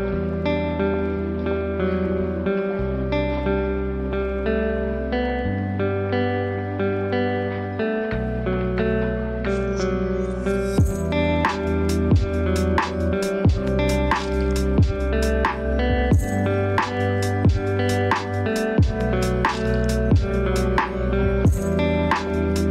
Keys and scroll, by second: 4.1 ctrl+v, 4.8 ctrl+a, 15.4 ctrl+space.